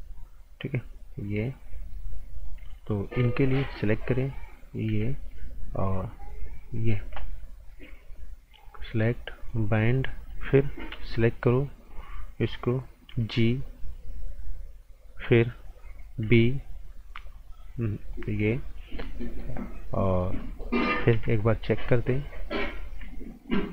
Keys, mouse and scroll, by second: 1.6 click, 3.2 b, 3.8 click, 4.9 g, 5.3 click, 9.8 right click, 10.9 b, 11.9 click, 13.2 g, 13.8 click, 16.2 b, 18.0 click, 19.2 right click, 19.8 scroll down 1, 20.0 right click, 21.1 z, 21.4 scroll down 1, 21.7 right click, 21.9 scroll down 1, 22.6 click, 22.8 z, 23.5 click.